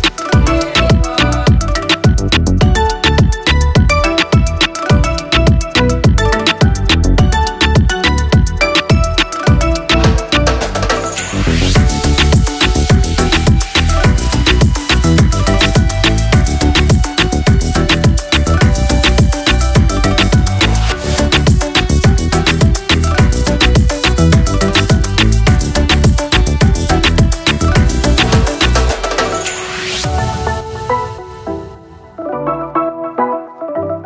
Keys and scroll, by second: 4.6 ctrl+=, 7.7 ctrl+[, 14.1 Up, 14.9 Left, 22.8 ctrl+-, 30.2 ctrl+z, 32.2 ctrl+c.